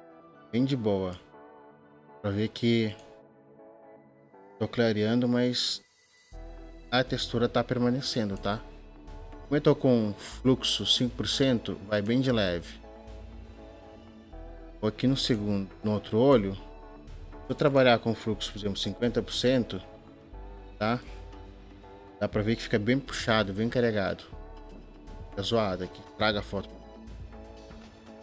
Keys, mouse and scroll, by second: 27.4 ctrl+z.